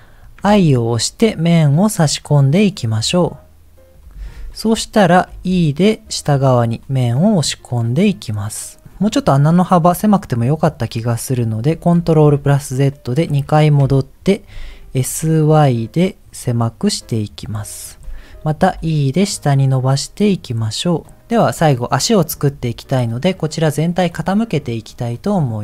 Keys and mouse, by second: 5.3 e, 10.0-11.0 middle drag, 12.0 ctrl+z, 12.4 ctrl+z, 14.5 s, 18.7 e, 21.6 middle click, 24.9 click.